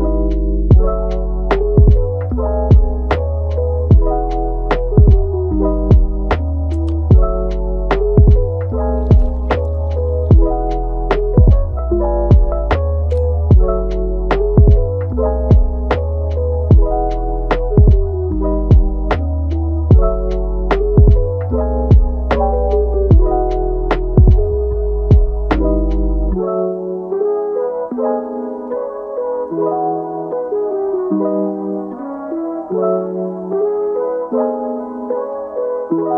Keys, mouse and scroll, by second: 2.2-4.3 middle drag, 4.3 click, 4.9-5.4 middle drag, 5.4-5.7 scroll down 5, 5.7-6.6 middle drag, 6.6 Tab, 7.6 KP_1, 8.0-8.6 scroll up 2, 8.6 click, 9.5 s, 11.6 alt+s, 13.6 alt+s, 15.0 click, 15.5 alt+s, 16.4 alt+s, 18.7 click, 19.2 alt+s, 20.6 click, 21.6 alt+s, 24.0 click, 24.5 alt+s, 25.5 scroll down 1, 25.8-27.6 middle drag, 27.6 scroll up 1, 27.8-29.2 middle drag, 29.2 KP_7, 29.8-30.4 scroll up 4, 30.4 shift+middle click, 30.9 Tab, 31.6 click, 32.4 scroll up 2, 32.7 shift+middle click, 33.5 scroll down 1, 35.2 scroll up 1, 35.5 shift+middle click, 35.9 click.